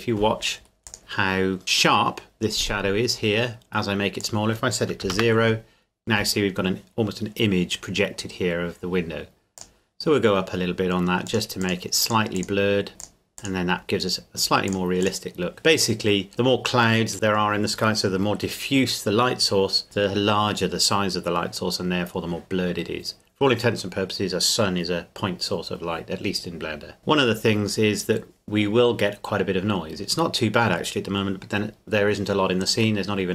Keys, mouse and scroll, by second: 0.6-1.6 scroll up 2, 0.9 click, 4.2 click, 5.0 KP_0, 5.1 KP_Enter, 9.6 click, 27.0-28.8 scroll up 1, 31.1-31.6 scroll up 1.